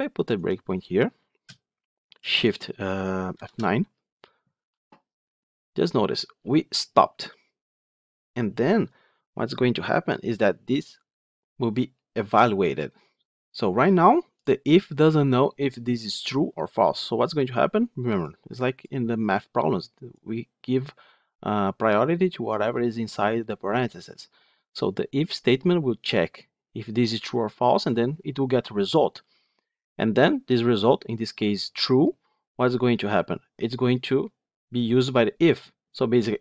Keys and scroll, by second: 0.4 ctrl+F8, 3.2 shift+F9.